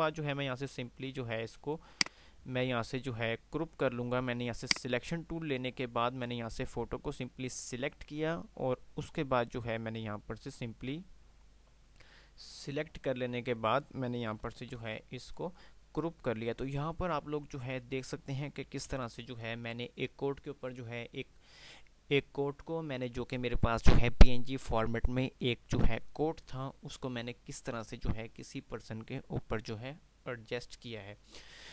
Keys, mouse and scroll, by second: 1.8 click, 2.2 click.